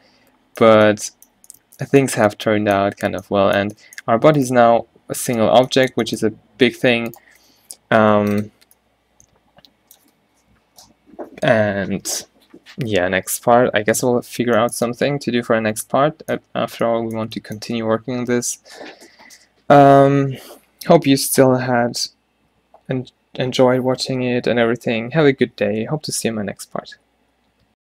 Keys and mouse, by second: 4.7 g, 8.0 a, 14.1 middle drag, 15.4-17.0 middle drag, 21.0-27.8 middle drag.